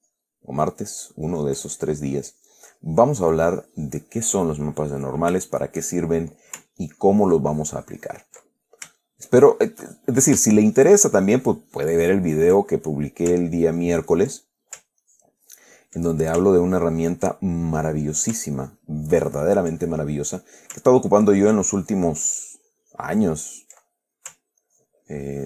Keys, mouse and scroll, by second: 1.5-5.4 ctrl+drag, 5.8 shift+click, 7.1-8.8 ctrl+drag, 8.8 ctrl+middle click, 9.0-10.1 ctrl+shift+drag, 10.2 ctrl+shift+click, 11.0-13.4 ctrl+drag, 13.8 ctrl+click, 14.7 ctrl+click, 15.3 ctrl+click, 16.3 ctrl+click, 16.9 ctrl+click, 17.7-18.2 ctrl+middle drag, 18.5 ctrl+middle click, 18.9 ctrl+click, 19.3-20.5 ctrl+drag, 20.1-20.5 ctrl+middle drag, 20.6-21.1 ctrl+middle drag, 21.4-24.1 ctrl+drag, 24.1-24.6 ctrl+middle drag, 24.9-25.4 ctrl+drag.